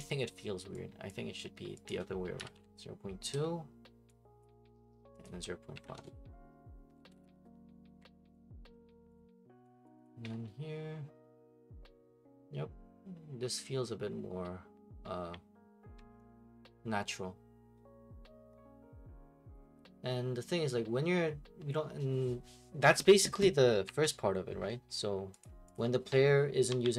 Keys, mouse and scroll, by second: 0.0 click, 1.1 click, 1.9 click, 2.3-3.3 typing, 4.4 click, 5.2 click, 5.6-7.9 typing, 8.3 click, 9.1 click, 9.8 click, 10.0 click, 23.8 Escape, 25.4 click, 25.7 click.